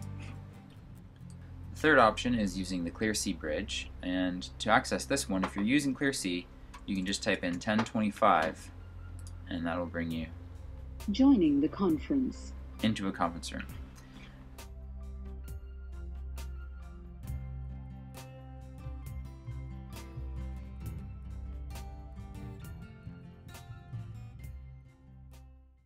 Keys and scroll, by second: 6.4-7.8 typing.